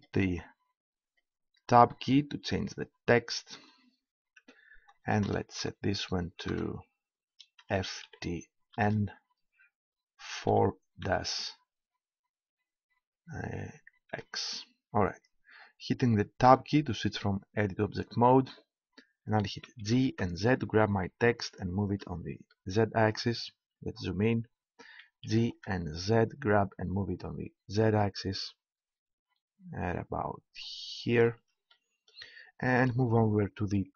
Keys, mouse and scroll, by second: 0.3-1.9 scroll up 1, 1.9 middle click, 4.4 Tab, 5.0 BackSpace, 5.3 BackSpace, 5.6 BackSpace, 6.4 BackSpace, 7.5 shift+f, 8.0 shift+t, 8.7 shift+n, 10.5 4, 11.2 -, 14.0 shift+x, 16.4 Tab, 19.6 g, 21.6 click, 22.5-23.9 drag, 23.9-25.9 middle drag, 25.0 g, 31.2-33.9 drag.